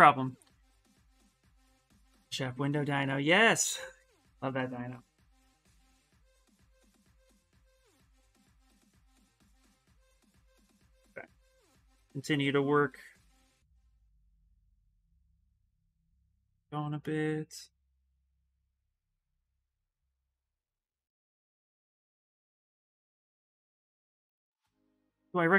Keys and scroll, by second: 4.5-5.4 typing, 19.8 s.